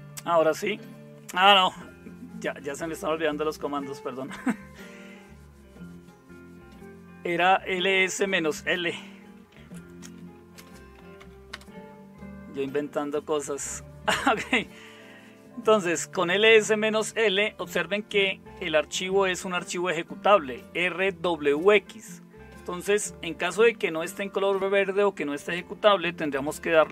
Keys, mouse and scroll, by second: 10.0-11.7 typing, 26.0-26.9 typing.